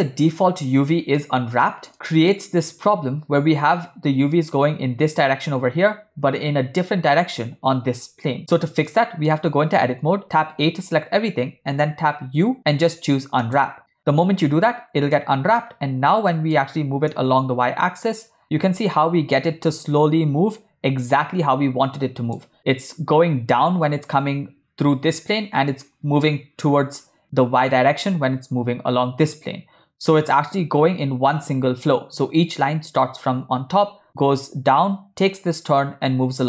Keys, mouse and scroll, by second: 1.3-1.7 middle drag, 1.9-2.3 shift+middle drag, 9.0 middle click, 9.4 Tab, 10.4 a, 12.1 u, 14.6 Tab, 15.2-15.6 middle drag, 16.4 middle click, 17.2-22.4 drag.